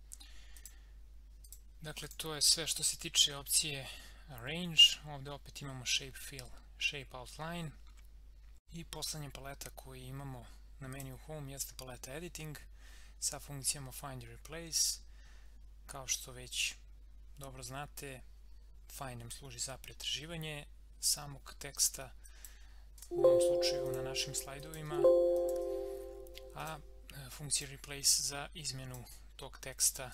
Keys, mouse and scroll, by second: 10.9 click, 14.7 click, 22.3 click, 23.0 Return, 23.9 click.